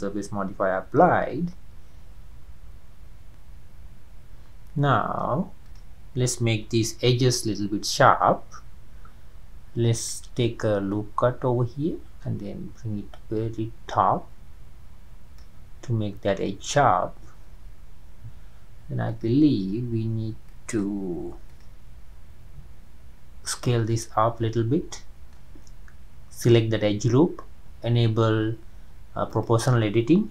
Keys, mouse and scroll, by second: 0.2-0.5 scroll down 2, 2.4-3.1 scroll up 2, 3.3-5.6 middle drag, 5.6 drag, 7.2 Tab, 10.0-14.1 drag, 17.1-18.5 scroll up 2, 19.1-20.8 drag, 21.5 alt+click, 24.0-27.0 middle drag, 29.3 click.